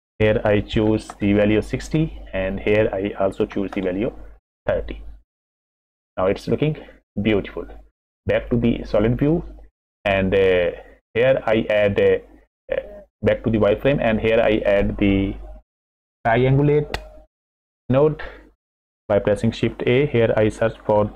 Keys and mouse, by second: 2.4-4.3 drag, 5.7 middle click, 6.6 middle click, 10.0 middle click, 11.2 middle click, 12.8 click, 14.0 middle click, 14.7 click, 17.7 click, 19.5 shift+a.